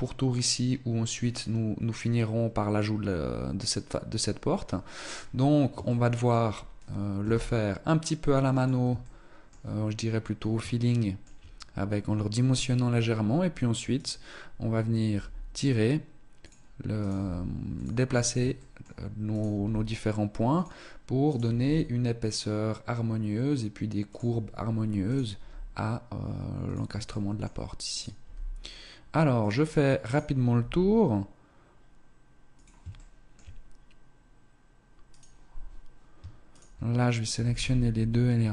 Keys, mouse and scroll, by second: 4.9-5.8 scroll up 1, 5.8 shift+middle click, 5.8-6.1 scroll up 1, 9.0 shift+middle click, 9.6-9.9 scroll down 1, 10.3 shift+middle click, 10.3-11.1 scroll down 1, 13.9 right click, 15.0 g, 16.9 right click, 17.1 g, 18.1-18.5 scroll up 1, 18.5 shift+middle click, 18.9 right click, 18.9 g, 20.7 right click, 21.4 g, 25.1 right click, 25.3 g, 26.6 shift+middle click, 27.5 right click, 27.5 g, 30.0 right click, 30.5 g, 32.9 shift+middle click, 34.6 right click, 36.4 shift+right click, 37.3 g.